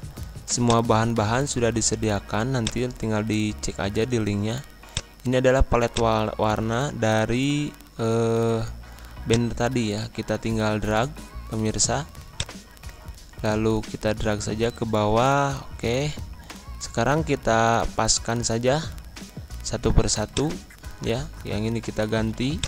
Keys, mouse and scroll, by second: 4.9 click, 9.2-19.0 drag, 19.0 Pause, 20.2 click.